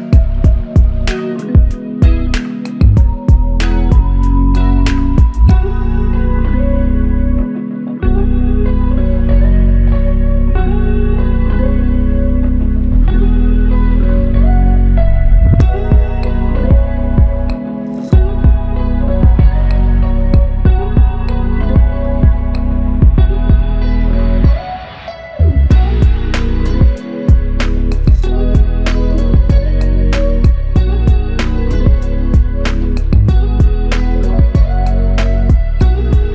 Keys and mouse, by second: 5.6 double click, 8.5 ctrl+alt+click, 9.7 alt+click, 11.2 double click, 12.3 shift+click, 12.7 shift+double click, 13.3 shift+click, 14.9 shift+click, 15.1 shift+double click, 15.6 alt+click, 18.7 f, 21.4 double click, 22.7 alt+click, 25.6 double click, 26.5 alt+click, 29.2 double click, 31.7 shift+click, 34.5 typing.